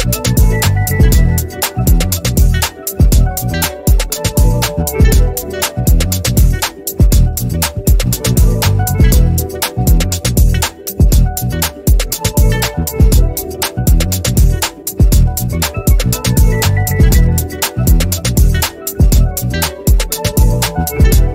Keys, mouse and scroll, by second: 0.8 Delete, 2.3 click, 5.1 r, 5.4 click, 6.0 v, 6.5 shift+click, 7.6 ctrl+g, 8.6 click, 9.6 ctrl+z, 11.8 click, 13.8 ctrl+z, 14.5 click, 15.8 ctrl+shift+g, 17.4 click, 18.7 Delete, 19.4 ctrl+scroll up 1, 20.0 click.